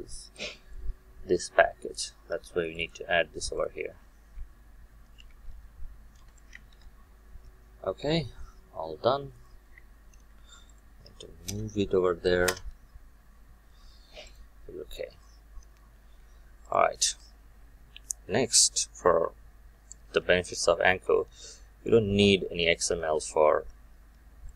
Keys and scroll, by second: 2.3 ctrl+c, 6.2 Return, 6.7 ctrl+v, 11.4 alt+Return.